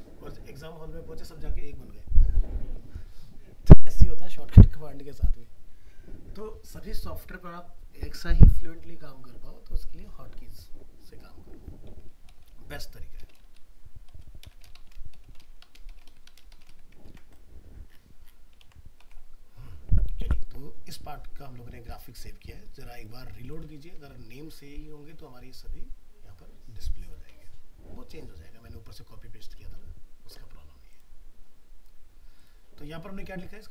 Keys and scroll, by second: 17.1 ctrl+s, 19.0 alt+Tab, 20.6 alt+Tab.